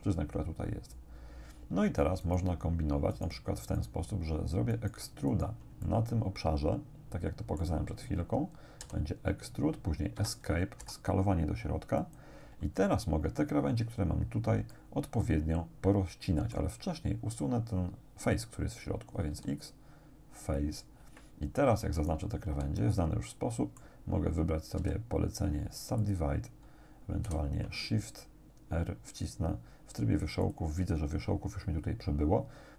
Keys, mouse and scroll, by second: 2.3 shift+right click, 3.1 shift+right click, 3.8 shift+right click, 4.7 shift+right click, 5.3 shift+right click, 5.9-7.8 shift+drag, 8.9 e, 10.2 Escape, 11.3 s, 12.0 click, 12.8 scroll up 1, 14.7-16.8 middle drag, 19.3 x, 20.5 click, 22.0 alt+shift+right click, 22.8-24.0 alt+shift+drag, 24.8 w, 26.1 click, 27.3 shift+r, 30.5 click.